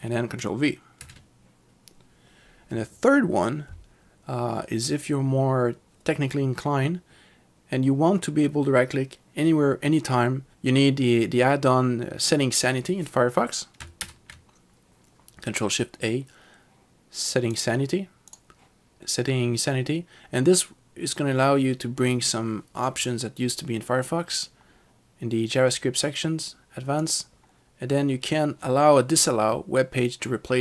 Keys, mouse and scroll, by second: 1.0 ctrl+v, 14.0 ctrl+shift+a, 17.6 click, 24.4 click, 27.1 click.